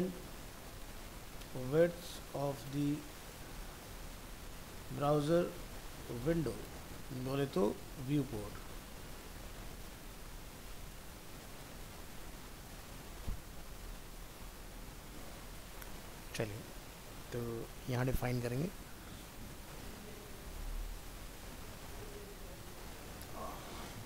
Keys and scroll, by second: 11.7 ctrl+s.